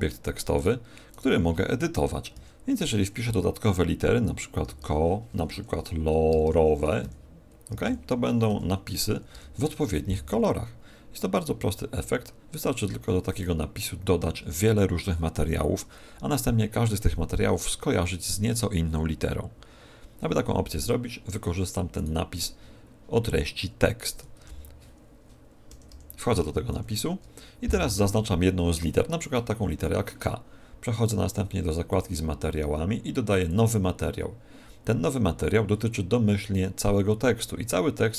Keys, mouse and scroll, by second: 0.5-2.3 right drag, 1.1 Tab, 2.3 Right, 3.2 Right, 4.6 o, 4.7 o, 5.5 Right, 6.3 o, 6.5 o, 7.0 Right, 7.7 o, 7.9 o, 8.5 Right, 9.1 o, 9.3 o, 10.9-14.2 middle drag, 13.3 Tab, 19.8-21.9 middle drag, 21.9-23.9 right drag, 24.3 Tab, 25.7 Left, 25.9 Left, 26.4 Left, 26.7 shift+Right, 28.5 shift+Right, 31.9-35.3 drag.